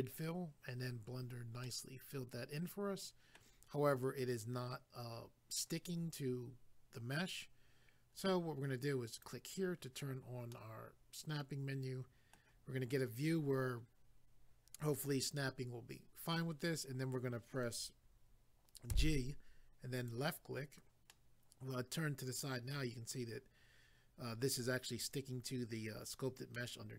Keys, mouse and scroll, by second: 1.7 middle click, 9.2 click, 9.3 click, 10.5 middle click, 12.8 scroll down 1, 20.0 click, 20.1 click, 21.1 middle click, 26.5 middle click.